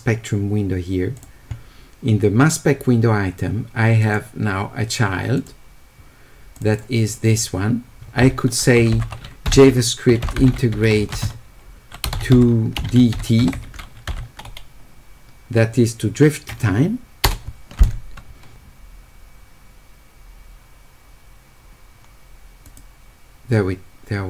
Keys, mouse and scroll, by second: 4.0 click, 5.4 click, 6.6 click, 6.7 click, 9.5-11.7 typing, 12.8 d, 22.6 click.